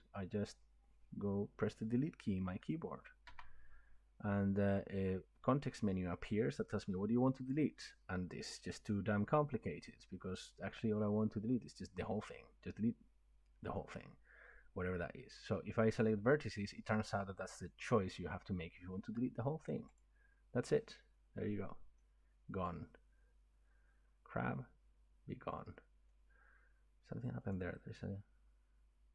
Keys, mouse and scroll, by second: 3.3 Delete, 20.0-25.1 drag, 26.1-27.5 middle drag, 27.5-29.1 drag.